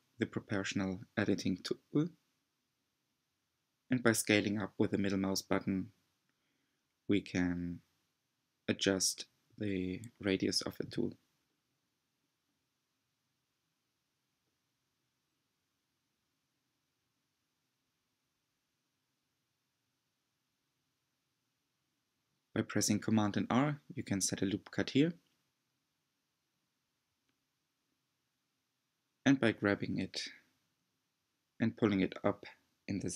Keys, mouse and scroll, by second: 8.2-10.7 middle drag, 10.7 click, 11.6 g, 17.3-20.1 middle drag, 20.1 r, 22.2 middle click, 23.1-23.5 scroll up 2, 24.5 scroll up 1, 24.6 g, 26.5-27.5 drag, 27.5 g, 31.9-33.1 middle drag.